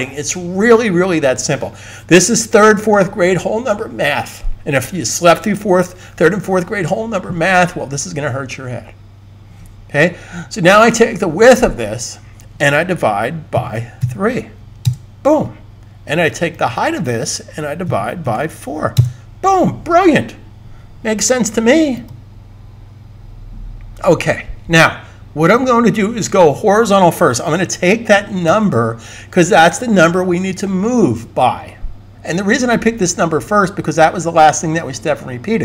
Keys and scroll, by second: 13.2-14.4 typing, 17.7-18.2 typing, 28.4 super+c.